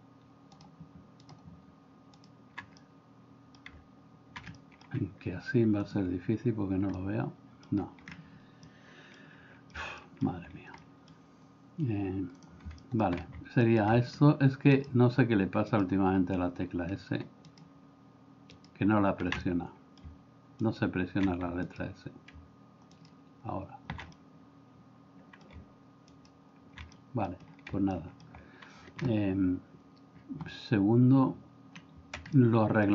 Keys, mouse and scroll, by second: 2.8 middle click, 4.6 middle click, 5.9 click, 7.0 middle click, 8.7 middle click, 9.7 middle click, 10.1 middle click, 10.8 middle click, 12.8 middle click, 19.4 middle click, 24.2-25.6 middle drag, 27.1 middle click, 27.9 middle click, 32.3 middle click.